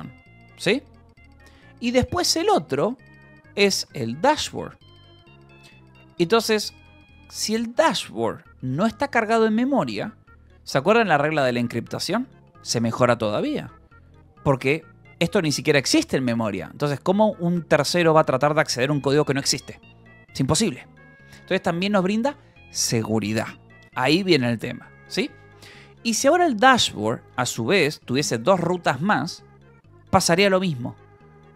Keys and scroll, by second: 3.9 shift+j, 5.9 Escape, 6.5 j, 7.0 j, 7.7 j, 24.1 Escape, 24.6 k, 25.3 j.